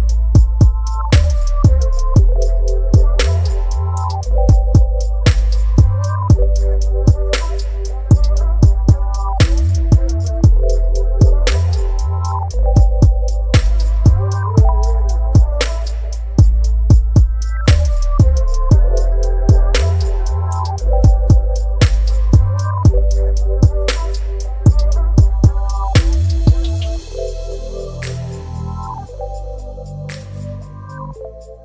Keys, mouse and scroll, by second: 6.6-8.6 alt+drag, 10.7 shift+i, 11.0 shift+p, 11.5 shift+s, 12.3 shift+m, 13.4 ctrl+a, 15.5 click, 15.6 click, 21.6 click, 24.5 click, 29.2 ctrl+click.